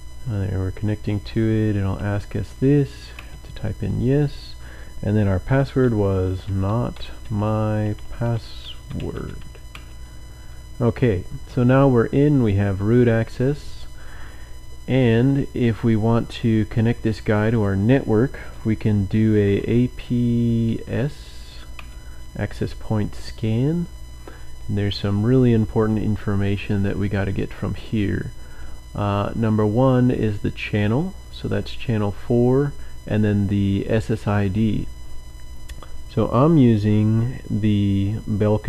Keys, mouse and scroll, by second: 1.7-3.4 typing, 5.9-10.7 typing, 12.7 click, 15.8-17.3 drag, 17.4 click, 19.2-20.6 typing, 21.7 typing, 21.7 Return, 31.4 click.